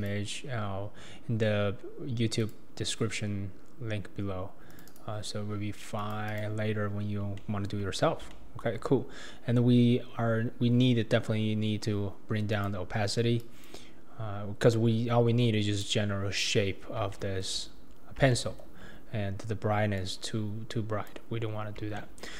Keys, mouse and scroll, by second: 7.4-7.9 shift+middle drag, 8.3-11.3 shift+middle drag, 12.5-16.4 drag.